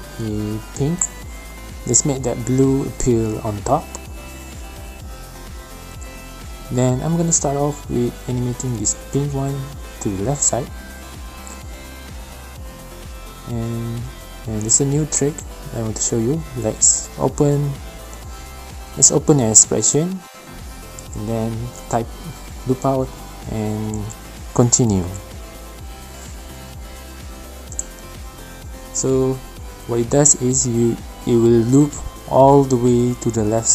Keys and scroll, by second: 0.0-0.3 typing, 8.6-9.3 typing, 9.9 alt+shift+p, 20.3 Right, 20.3-22.3 typing, 20.6 Return, 22.4 Down, 22.5 Down, 22.8 Return, 23.3 ä, 24.2 Return, 27.5 space, 29.7 space, 33.4 BackSpace.